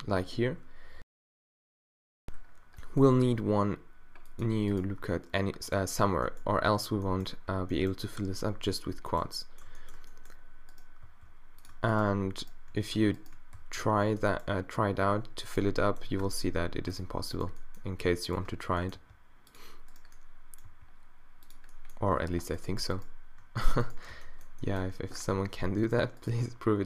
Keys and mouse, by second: 3.2 ctrl+r, 7.8 middle click, 9.5 middle click, 11.1 e, 13.6 f, 14.4-16.2 middle drag, 16.2 q, 16.6 g, 17.1-18.8 drag, 19.0 g, 20.7 g, 21.5 click, 22.6 middle click, 24.1 right click, 24.1 q, 24.5 click, 24.8 click, 26.3 g.